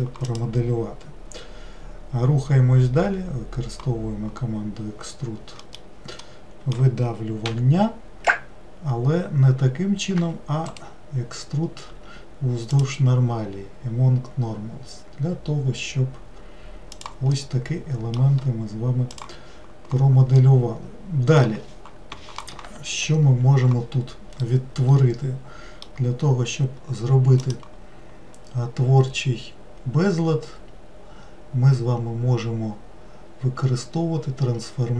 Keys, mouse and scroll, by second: 5.6-7.5 middle drag, 7.5 e, 12.8 right click, 17.3-23.4 middle drag, 24.4-27.4 middle drag, 27.4-30.6 drag.